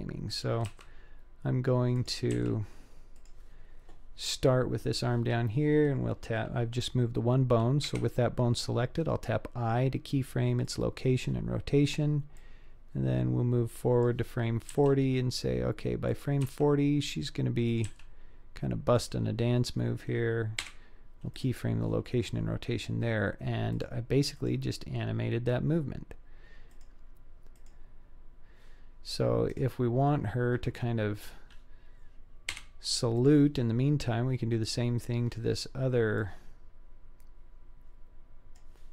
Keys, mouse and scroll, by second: 0.7 r, 2.3 g, 7.9 i, 12.4-14.1 drag, 14.8 g, 16.4 r, 17.9 g, 20.6 i, 23.8 click, 24.4 click, 26.8 click, 27.6 click, 29.5 click, 32.5 i, 36.3-38.6 drag.